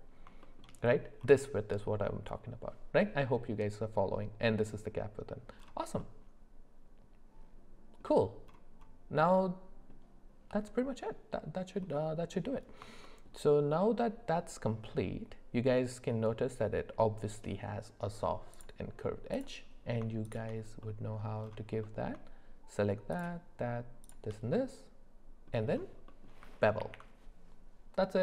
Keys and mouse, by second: 0.4 shift+middle click, 6.0-8.0 middle drag, 13.0 shift+middle click, 13.7 middle click, 20.8 middle click, 21.8 middle click, 24.5 middle click, 26.1 middle click, 26.8 ctrl+b.